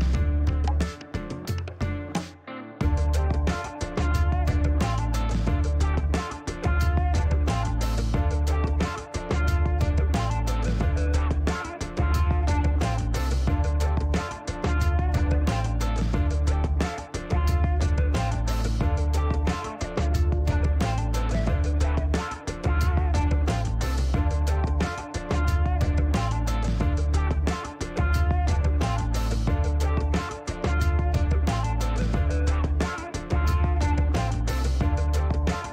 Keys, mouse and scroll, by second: 1.7 Delete, 3.6 click, 4.7 click, 6.0 click, 7.2-8.1 typing, 8.2 KP_Enter, 11.2-13.2 drag, 13.3 scroll down 1, 13.5 middle click, 14.1 scroll up 1, 14.3 middle click, 17.9 click, 18.4 click, 20.1 click, 21.0 click, 22.0 click, 22.7 right click, 23.7 click, 24.5 click, 25.7 click, 27.1-28.3 typing, 29.2 click, 30.8-32.3 drag, 33.0 click, 34.2 click.